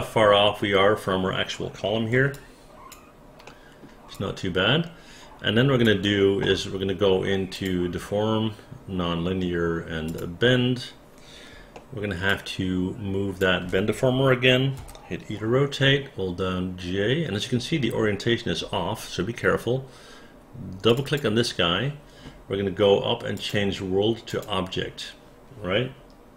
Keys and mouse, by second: 2.3 alt+click, 3.5 alt+middle click, 4.1-5.8 alt+drag, 10.1 click, 11.7 alt+middle click, 12.3-13.4 alt+drag, 14.8 e, 20.9 click, 21.1 click, 23.4 click, 24.3 click.